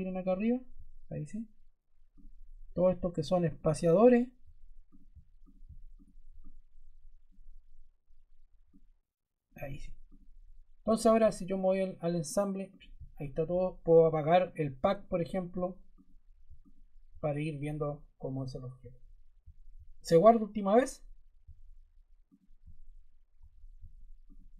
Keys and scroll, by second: 4.3 shift+Caps_Lock.